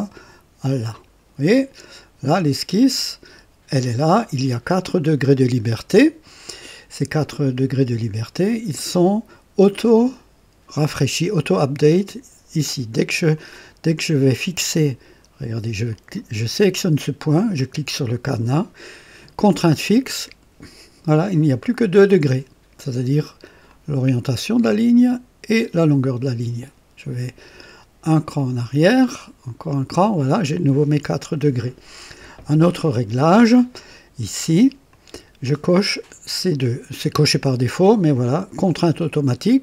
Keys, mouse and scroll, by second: 0.8 click, 8.4 click, 13.3 click, 14.3 right click, 15.8 click, 19.7 click, 23.6 click, 24.3-25.7 drag, 28.2 click, 29.0 click, 34.8 click.